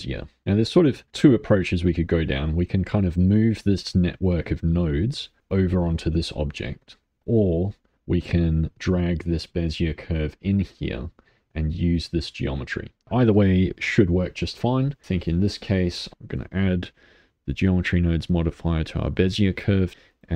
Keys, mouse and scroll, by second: 0.4-1.5 middle drag, 2.5 click, 3.5-5.4 middle drag, 5.4 click, 7.2 click, 8.7 click, 10.8-11.9 shift+middle drag, 11.9-13.0 drag, 16.1-20.3 drag.